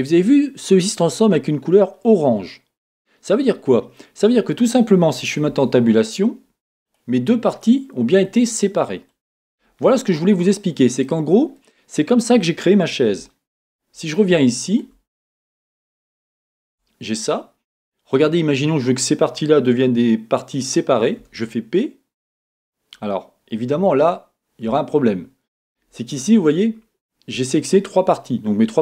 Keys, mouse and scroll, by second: 0.0-5.5 middle drag, 5.5 Tab, 6.9 click, 7.5 click, 10.3-11.0 scroll down 2, 11.0-15.1 middle drag, 13.9-14.4 scroll up 2, 15.1 scroll up 2, 15.8 click, 16.8 Tab, 17.3-17.9 scroll down 2, 17.9-28.8 middle drag, 21.2 p, 23.8 Escape.